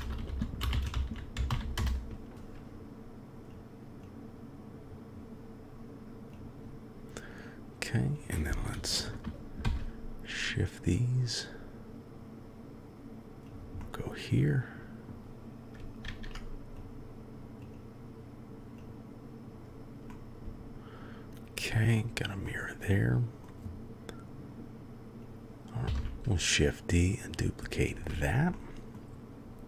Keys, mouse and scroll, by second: 0.8 click, 4.0 click, 8.1 click, 9.6 shift+d, 13.8-15.1 drag, 16.0 ctrl+a, 17.6-18.8 drag, 20.0-21.7 drag, 22.4-23.4 drag, 25.2 click, 25.8 shift+d, 28.5-28.9 drag.